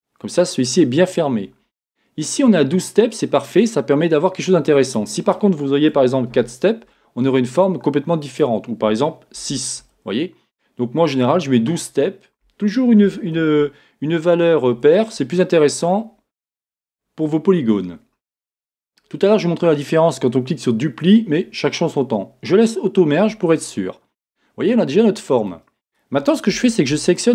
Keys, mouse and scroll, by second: 23.5-27.3 middle drag, 25.5-26.5 scroll up 2, 26.5-27.3 scroll up 1.